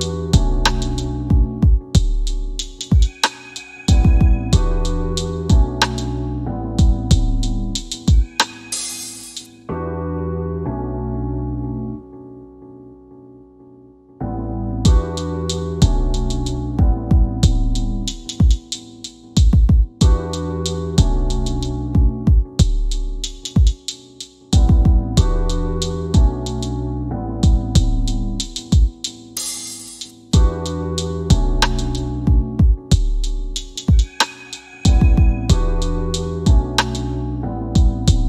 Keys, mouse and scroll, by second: 0.3 click, 10.5 click, 16.3 click, 17.2 F10, 28.9 KP_8, 28.9 KP_Enter, 30.2 click.